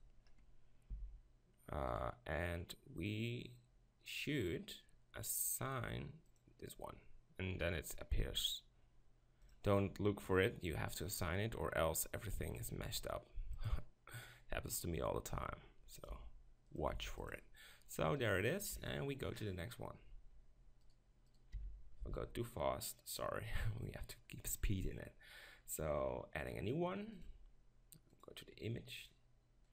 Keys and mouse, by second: 0.0 click, 0.9 s, 6.5-8.3 drag, 8.3 s, 9.6-11.4 drag, 12.6-13.7 drag, 15.4 s, 16.1 g, 17.0 s, 18.7 KP_7, 21.6 z, 22.0 b, 26.4-29.7 drag.